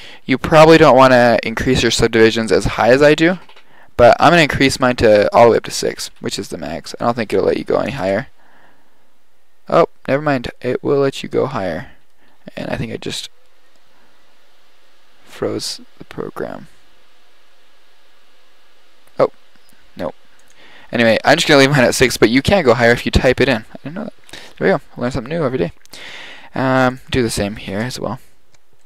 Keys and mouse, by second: 4.0-5.3 drag, 26.9-28.5 drag.